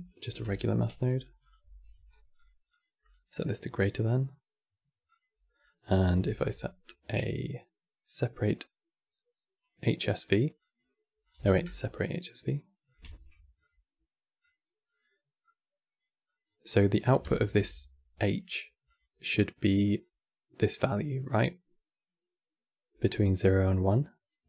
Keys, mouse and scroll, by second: 0.0 click, 0.1 c, 1.4 x, 1.7 q, 2.8-5.9 drag, 5.9 shift+a, 10.3 click, 10.9 click, 11.1 x, 11.4 q, 12.6 click, 12.8 shift+a, 15.1 click, 15.9 click, 16.5 click, 17.1 ctrl+shift+click, 18.5 click, 24.3 click.